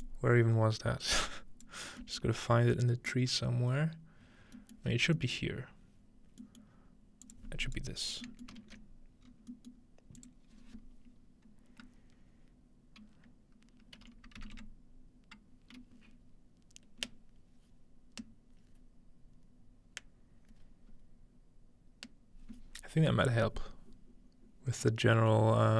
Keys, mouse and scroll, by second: 0.0-1.7 drag, 1.9-3.7 scroll down 1, 3.7-4.4 scroll down 1, 4.5-4.9 scroll down 2, 4.9 scroll up 2, 5.6 scroll up 2, 6.6-8.6 scroll up 2, 6.7-8.2 middle drag, 7.2-8.6 drag, 7.6 right click, 8.5 ctrl+middle click, 8.6 scroll, 9.2-10.2 scroll up 1, 10.2-11.7 drag.